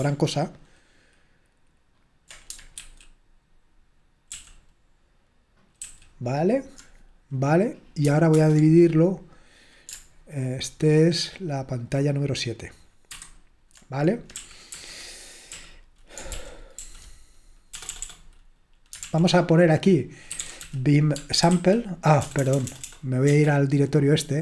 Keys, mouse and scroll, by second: 2.9 super+w, 4.4 super+l, 8.4 super+Return, 13.2 super+/, 14.4 super+l, 14.7 super+h, 15.5 l, 16.3 super+l, 16.8 super+l, 17.7 BackSpace, 17.9 BackSpace, 18.0 BackSpace, 20.1-22.8 typing, 24.2-24.4 typing.